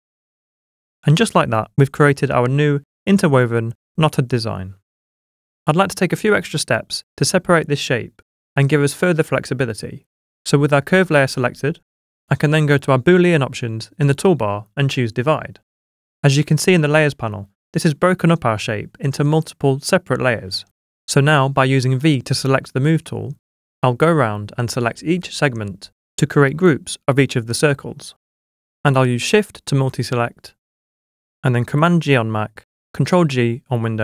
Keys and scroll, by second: 21.4 v, 26.3 super+g, 29.0 super+g, 31.6 super+g.